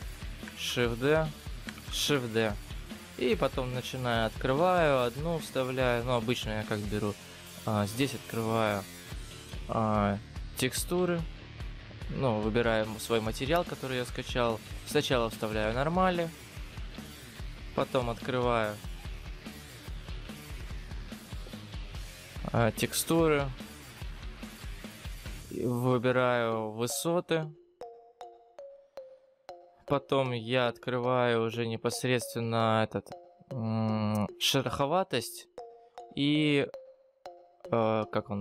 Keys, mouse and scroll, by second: 0.7 shift+d, 1.9 shift+d, 6.5 click, 17.2 click, 29.6 click.